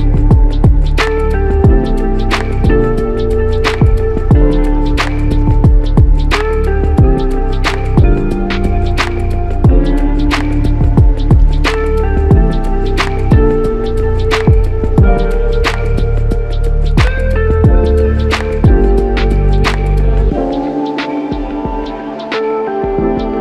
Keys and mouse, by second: 0.3 alt+click, 3.3 alt+click, 8.5 shift+click, 10.7 shift+click, 12.3 alt+shift+click, 15.2 alt+click, 20.0 alt+click, 20.4 alt+click, 23.3 alt+click.